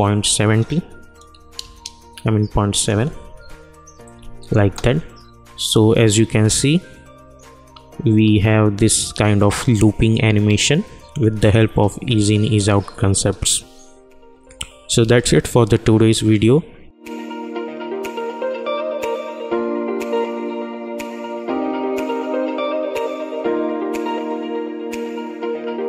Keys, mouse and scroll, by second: 2.7 click, 4.6 space, 14.4 space.